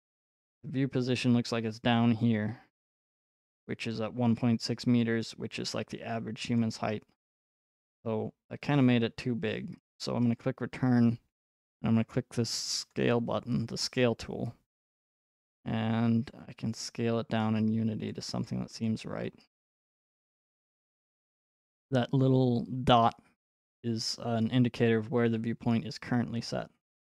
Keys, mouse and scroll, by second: 1.0-2.3 scroll, 6.6 click, 6.9-8.3 scroll, 10.4 click, 12.9 click, 18.4 right click, 18.9 click, 19.3-20.3 scroll, 21.3-21.9 scroll.